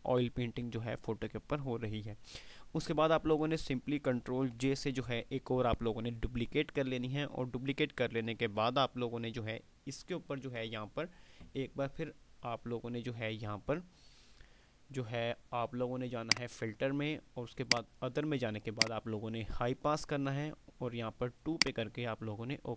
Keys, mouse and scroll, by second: 4.8 ctrl+j, 16.4 click, 21.5 click.